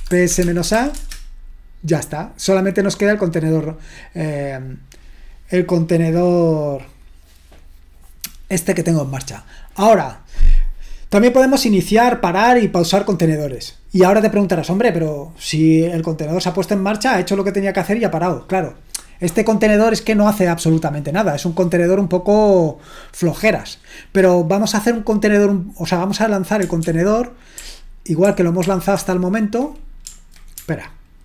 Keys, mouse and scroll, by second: 0.0-1.5 typing, 26.8 ctrl+p, 27.6 ctrl+p, 28.3 ctrl+p, 28.6 ctrl+p, 29.0 ctrl+p.